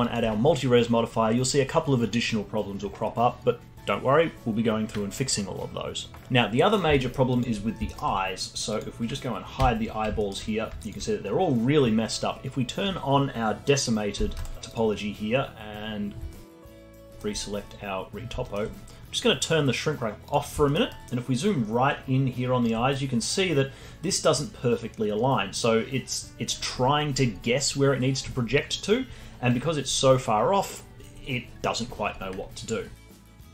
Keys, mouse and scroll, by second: 0.0 alt+click, 1.1-4.0 scroll down 1, 4.0 scroll down 1, 6.7 middle click, 7.0 alt+middle click, 7.3 alt+click, 7.6-8.2 scroll up 3, 7.9 alt+middle click, 8.7 click, 9.6 h, 9.9-10.2 scroll up 1, 10.2 alt+middle click, 10.8-14.0 alt+drag, 14.4 click, 15.4 click, 15.7-17.0 scroll up 1, 17.0-20.3 alt+middle drag, 20.3 click, 20.7 alt+middle drag, 20.9-24.3 alt+right drag, 33.1 alt+right click.